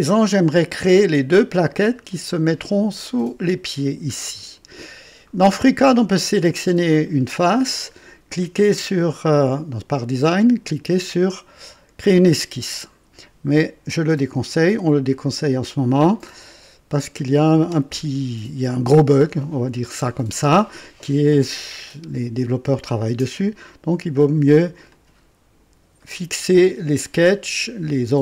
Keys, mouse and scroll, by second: 0.9-2.4 drag, 1.7-2.4 right drag, 4.1 scroll up 1, 4.8-5.3 right drag, 6.4 click, 20.2 scroll down 1, 23.3 click, 24.9-25.8 drag, 26.0-26.7 right drag.